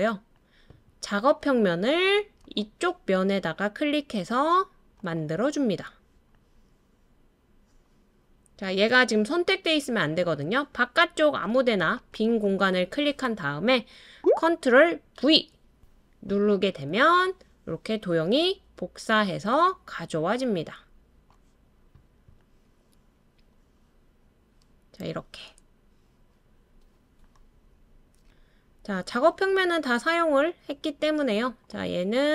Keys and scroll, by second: 15.2 super+v.